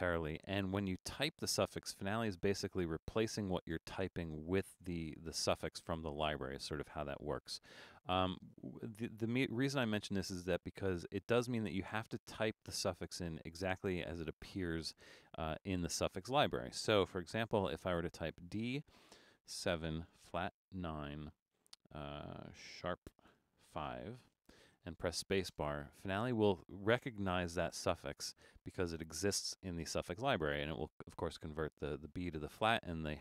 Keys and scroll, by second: 17.6 shift+d, 19.6-24.1 typing, 25.5 space.